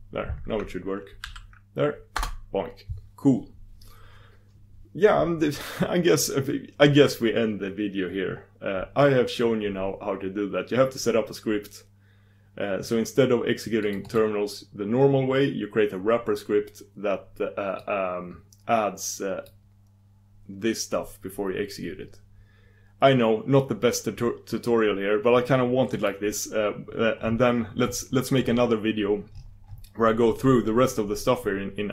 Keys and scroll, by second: 2.1 super+d, 25.9 super+d.